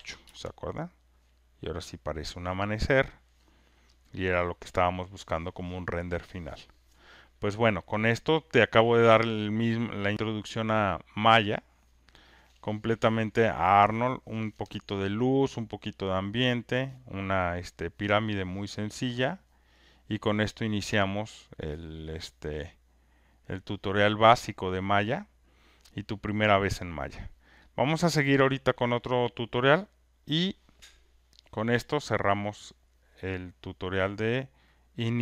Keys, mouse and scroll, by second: 0.2-3.8 Return.